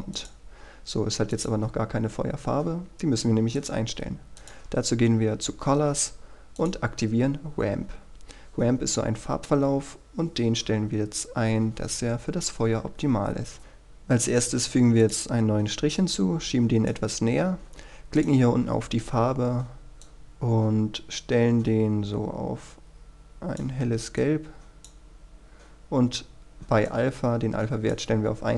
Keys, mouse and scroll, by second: 1.5 click, 6.0-6.7 scroll down 1, 6.7-28.5 drag.